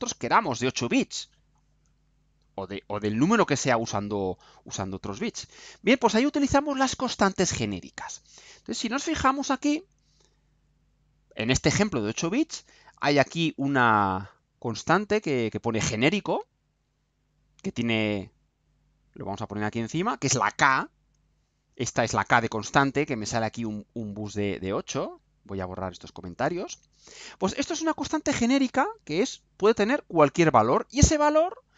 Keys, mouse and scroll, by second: 16.5 click, 19.7 click, 25.0 click, 26.4 Delete.